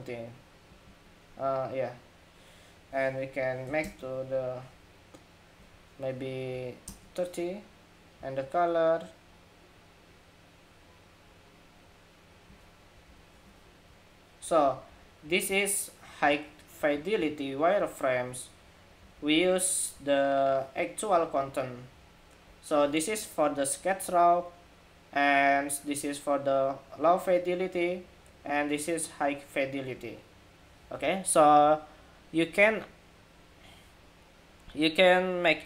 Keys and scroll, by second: 14.1 alt+Down, 14.4 alt+Down, 14.6 alt+Down, 15.0 alt+Down, 15.2 alt+Down, 15.9 alt+Down, 18.7 alt+Up, 19.7 alt+Up, 21.0 alt+Up.